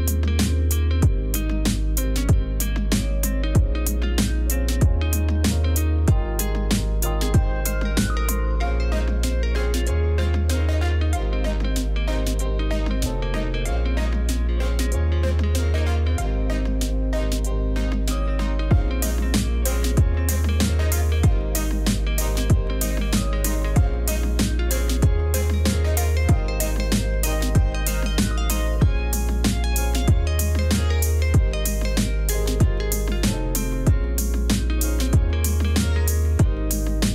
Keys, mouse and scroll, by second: 4.3 Return, 14.4 Return, 18.7 Return.